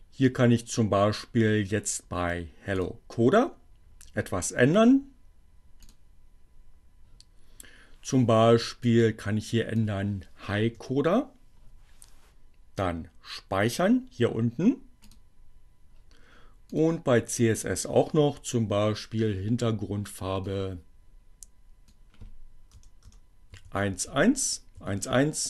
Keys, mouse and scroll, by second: 2.0 click, 5.6 click, 8.7 click, 10.5 i, 14.9 click, 16.7 click, 19.4-21.7 drag, 21.9 BackSpace, 23.5 1, 23.8 1.